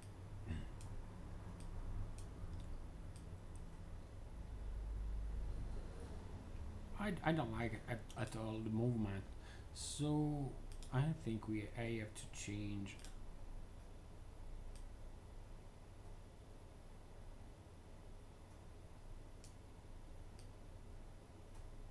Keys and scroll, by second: 0.0 3.